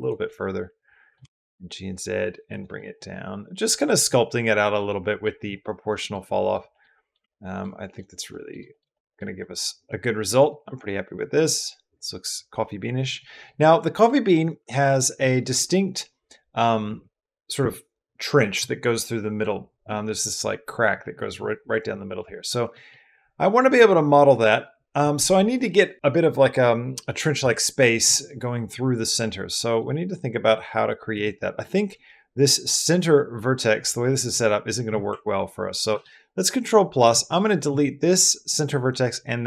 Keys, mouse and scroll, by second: 0.1 middle click, 1.0 g, 1.2 z, 2.3 click, 2.6-5.0 drag, 5.7 click, 6.1 click, 6.5 shift+click, 6.8 click, 7.1 ctrl+middle click, 7.6 middle click, 8.1 middle click, 8.5 shift+middle click, 8.7 middle click, 9.2 middle click, 10.4-12.9 middle drag, 13.0 middle click, 13.8 middle click, 15.2 middle click, 22.0 middle click, 22.5 middle click, 35.8 ctrl+KP_Add.